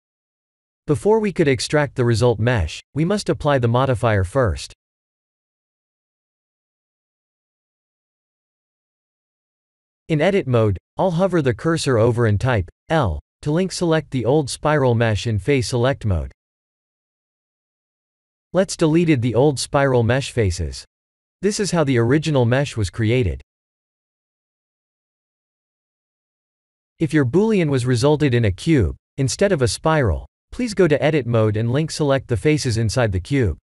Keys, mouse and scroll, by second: 1.3-1.7 scroll down 6, 2.3 ctrl+z, 5.9 click, 6.8 ctrl+a, 7.6 Tab, 8.3 scroll up 3, 8.9 middle click, 15.7 x, 17.7 3, 19.2 x, 20.9 middle click, 21.4 Tab, 21.7 middle click, 23.3 a, 23.8 middle click, 32.5 click, 33.2 click.